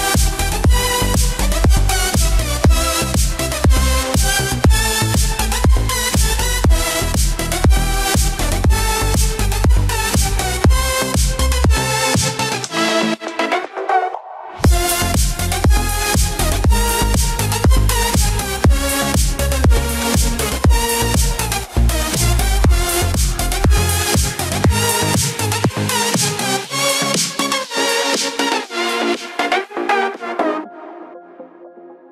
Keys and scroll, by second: 13.7 shift+F5, 18.0 ctrl+d, 19.7 ctrl+0, 30.7 ctrl+t.